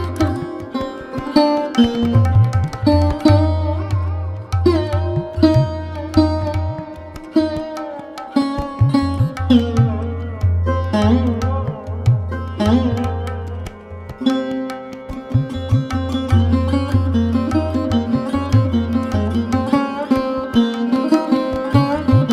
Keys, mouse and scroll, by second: 1.7 ctrl+click, 2.2 ctrl+z, 2.5 click, 4.4 alt+shift+click, 5.0 middle click, 5.9-6.4 drag, 6.4 Tab, 6.6 click, 6.9 KP_1, 7.6 Tab, 8.0-8.3 scroll up 1, 8.3 shift+middle click, 8.6-9.5 scroll up 1, 9.5-9.9 scroll up 1, 9.9 shift+middle click, 10.3-11.9 drag, 12.8 shift+click, 17.0 shift+click, 19.6 drag, 20.4 click, 21.2 alt+shift+click, 21.6 click, 21.9 alt+shift+click, 22.2 alt+shift+click.